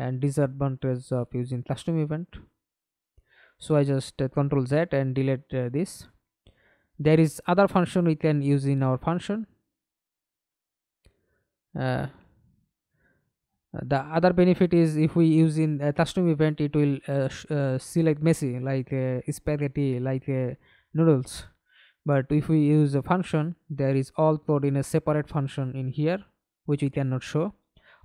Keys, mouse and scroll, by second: 2.6 ctrl+z, 3.0 ctrl+z, 3.7 ctrl+z, 4.4 right click, 5.8 scroll down 3, 6.1 right click, 16.1 right click, 17.6 right click, 18.4-20.3 scroll up 2, 22.8 alt+F9, 23.6 right click, 27.1 double click.